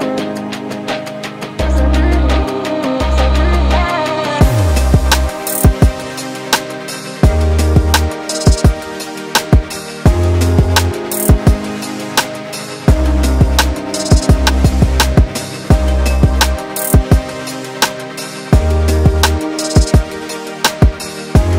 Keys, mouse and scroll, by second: 2.4 click, 2.4 middle click, 4.2 click, 4.8 middle click, 8.7 click, 9.2 click, 9.5 click, 9.8 middle click, 10.2-10.8 scroll up 1, 10.8 middle click, 10.8 scroll up 2, 11.6 scroll up 2, 11.9 middle click, 12.9 scroll down 4, 13.1 middle click, 16.1 click, 16.5 middle click, 17.1 click, 17.9 Tab, 17.9 scroll down 2, 18.2 ctrl+z, 18.3 ctrl+z, 18.7 click, 18.9 click, 19.1 click, 19.3 click, 19.8 click, 20.7 click.